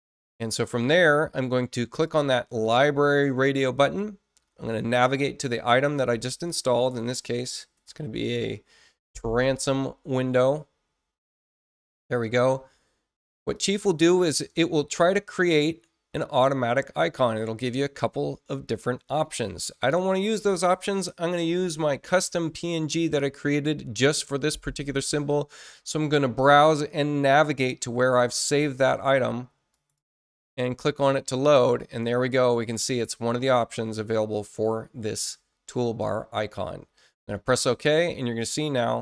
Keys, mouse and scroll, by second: 2.0 click, 3.7 click, 5.6 click, 6.7-8.4 typing, 11.5 click, 13.5 click, 25.0 click, 29.7 click, 29.9 click, 37.1 click.